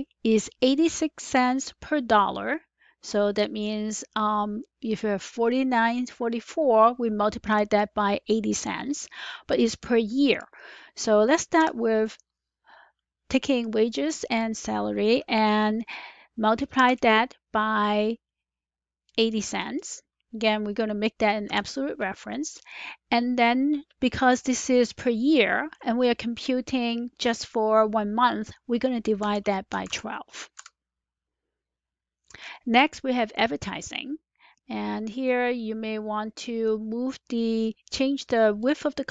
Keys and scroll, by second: 11.5 =, 16.7 *, 21.4 F4, 29.1-30.2 typing, 30.5 Return, 33.6 typing.